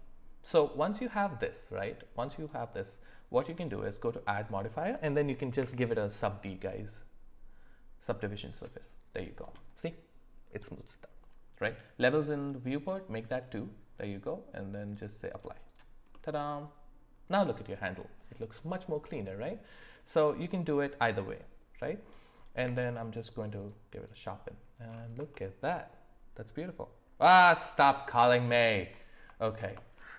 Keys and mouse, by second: 2.4 click, 3.6-8.8 drag, 12.5-15.4 drag, 16.1-17.3 middle drag, 20.1-22.1 middle drag, 22.6 q, 24.0 click, 25.3 middle click, 28.0 middle click, 29.4 shift+middle drag.